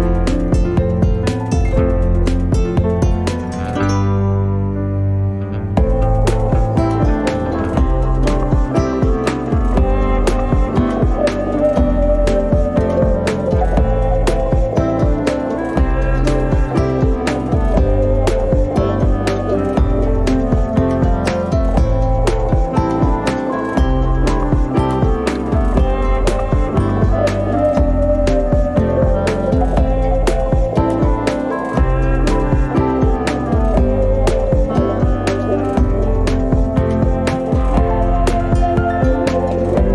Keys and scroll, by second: 0.9 m, 1.1 space, 8.5 m, 10.5 space, 12.7 m, 16.1 7, 16.9 Return, 21.8 2, 22.3 Return, 26.4 f, 28.8 2, 29.2 Return, 30.7 space, 34.9 f, 36.5 5, 36.9 Return, 38.9 r.